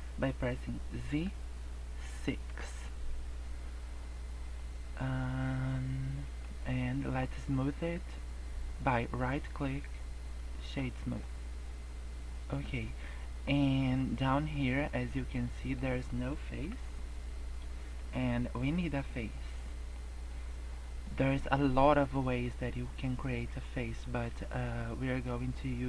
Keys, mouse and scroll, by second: 1.0 z, 4.5 middle click, 6.2 scroll up 1, 6.5 middle click, 7.3 scroll down 1, 7.5 middle click, 9.0 right click, 11.2 middle click, 12.7 scroll down 3, 13.0 middle click, 13.4 scroll up 3, 13.8 middle click, 15.4 middle click, 16.0 middle click, 16.7 Tab, 16.8 middle click, 18.2 middle click, 19.1 middle click, 19.5 middle click, 20.2 middle click.